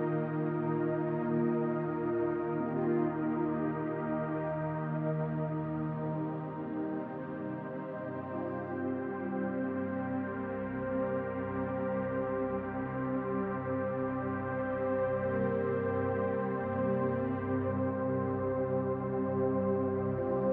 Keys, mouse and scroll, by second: 0.7 click, 1.3-2.6 middle drag, 2.6 click, 2.8-4.3 middle drag, 4.3 click, 4.5-6.0 middle drag, 6.0 click, 6.3-8.2 middle drag, 6.9 scroll up 2, 8.2 click, 8.6 scroll down 2, 8.7-10.3 middle drag, 9.1-9.7 scroll up 2, 9.7-10.3 scroll up 1, 10.3 click, 10.6-12.4 middle drag, 12.4 click, 12.7-14.2 middle drag, 14.2 click, 14.5 scroll down 2, 14.6-16.0 middle drag, 15.4-16.0 scroll up 2, 16.0-17.4 drag, 17.4-19.4 middle drag, 19.4 click, 19.8-20.5 middle drag.